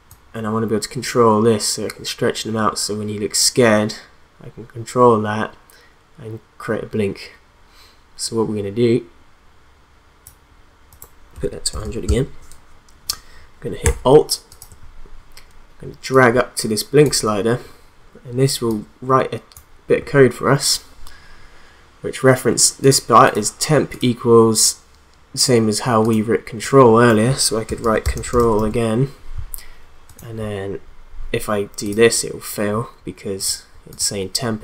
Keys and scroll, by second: 11.4 1, 11.7 0, 12.0 Return, 27.4-29.0 typing.